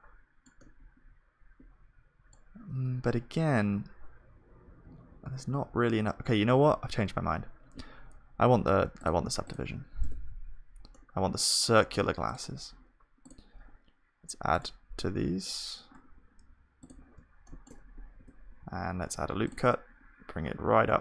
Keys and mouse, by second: 1.1-3.8 middle drag, 4.6 ctrl+z, 10.1 Tab, 10.1-15.6 drag, 14.6-15.6 right drag, 17.4-19.0 drag, 17.4-19.0 middle drag, 18.2 Tab, 18.2 right click, 19.0 ctrl+r.